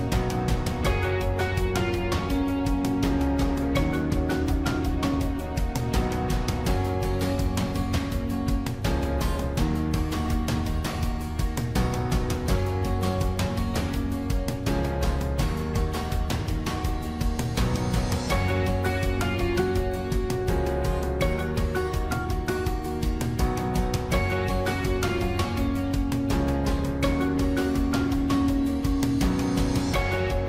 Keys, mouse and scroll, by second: 1.1 ctrl+-, 2.3 ctrl+-, 2.8 ctrl+-, 3.4 ctrl++, 4.0 ctrl+-, 14.2 ctrl+-, 21.9 ctrl++.